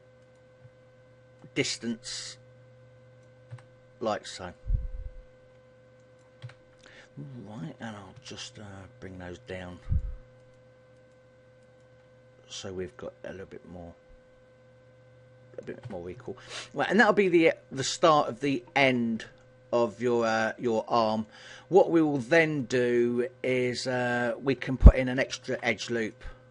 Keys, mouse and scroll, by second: 0.3 right click, 1.5 shift+right click, 2.5 click, 3.7 a, 4.7 right click, 6.6 a, 7.0 middle click, 8.2 KP_1, 9.5 right click, 9.9 shift+right click, 10.5 right click, 11.1 right click, 11.7 shift+right click, 13.1 click, 16.0 a, 16.3 middle click, 19.5 middle click, 21.4 middle click, 22.7 shift+middle click, 23.3 middle click, 25.3 ctrl+r.